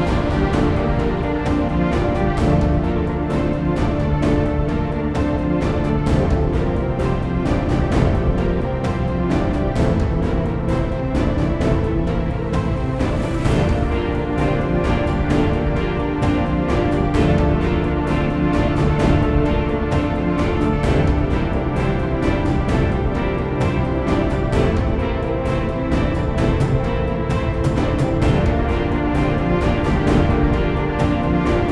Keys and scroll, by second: 0.1 Return, 16.3-18.1 typing, 18.9 Return, 28.1 ctrl+w.